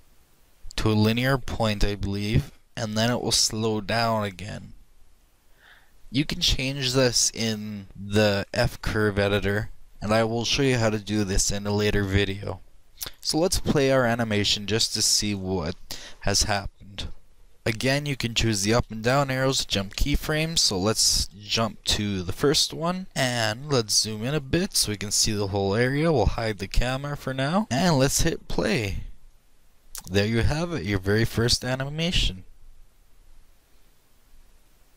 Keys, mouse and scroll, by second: 16.4-17.5 middle drag, 17.9 Up, 18.4 Up, 18.8 Up, 19.5 Down, 21.3 Up, 21.5 Up, 21.7 Up, 23.1 Down, 23.8 middle click, 24.0-25.5 middle drag, 25.6-26.8 shift+middle drag, 27.6 click, 29.3-31.0 drag.